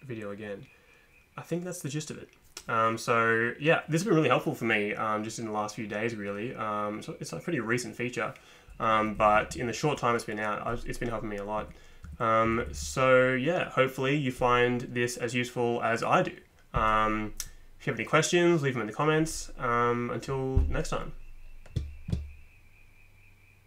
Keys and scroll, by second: 8.9 Up, 9.2 Up, 9.4 Up, 9.5 Up, 11.6 Up, 12.5 Down, 12.6 Down, 12.7 Down.